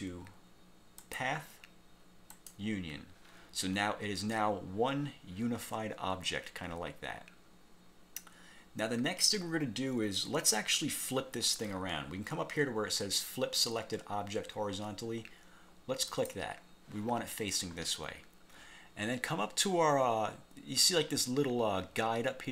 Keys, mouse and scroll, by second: 1.1 click, 2.4 click, 16.2 click.